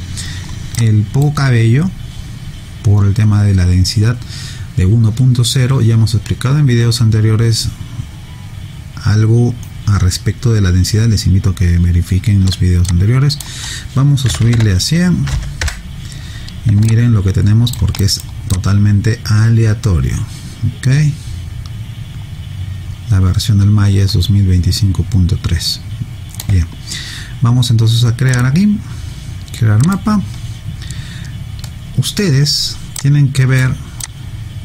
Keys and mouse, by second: 0.8 alt+click, 12.9 click, 14.3 1, 14.8 0, 15.6 Return, 16.9 alt+click, 18.0 alt+right click, 18.5 alt+click, 28.3 click, 33.0 click.